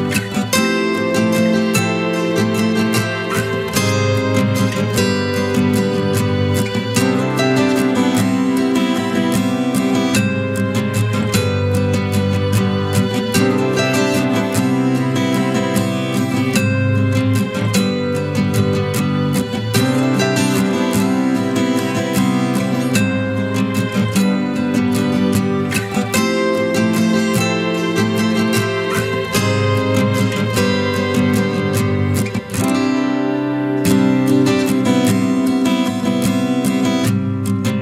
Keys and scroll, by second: 18.4 ctrl+t.